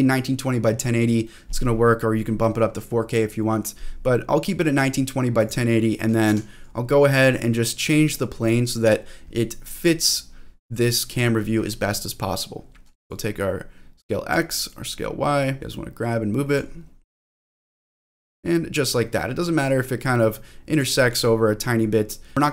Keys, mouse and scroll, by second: 5.4 click, 6.3 g, 7.1 click, 7.8 click, 13.0-14.3 drag, 14.6-16.5 drag, 15.6 g, 17.3-20.8 drag, 21.1 click, 22.4 click.